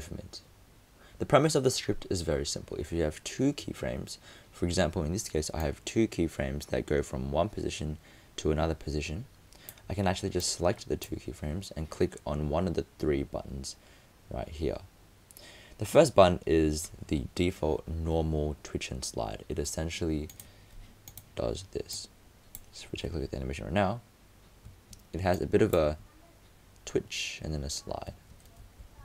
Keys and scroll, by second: 28.8 super+z.